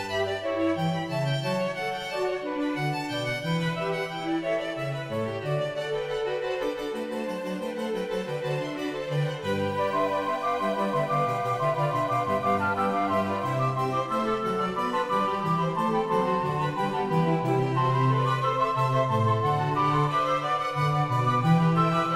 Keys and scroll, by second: 21.8 ].